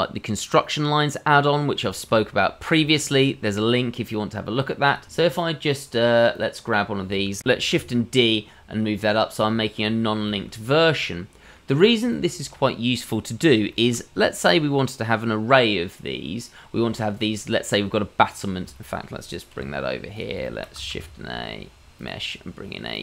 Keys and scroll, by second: 7.7 shift+d, 19.5 g, 20.9 shift+a.